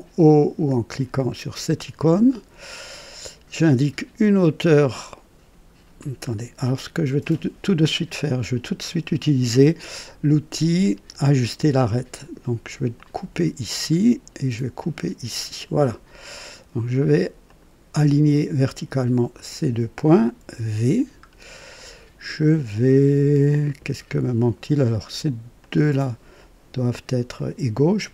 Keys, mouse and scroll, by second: 1.9 o, 3.5-4.6 right drag, 6.2 scroll up 1, 6.6 right click, 11.5 click, 12.9 click, 14.8 click, 16.1 right click, 17.4 click, 19.3 click, 20.4 v, 20.5 v, 21.2-21.6 scroll down 1, 21.9 right click, 25.6 click, 27.3 click.